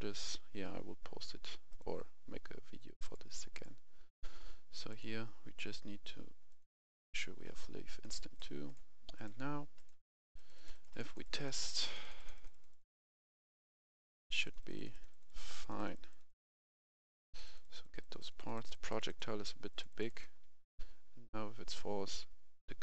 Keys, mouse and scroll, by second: 0.9 scroll down 1, 1.6 click, 10.1 click, 10.6 click, 11.0 click, 12.1-15.3 typing, 12.3 click, 12.8 click, 13.8 click, 16.5 a, 16.7 w, 17.2 w, 17.2 w.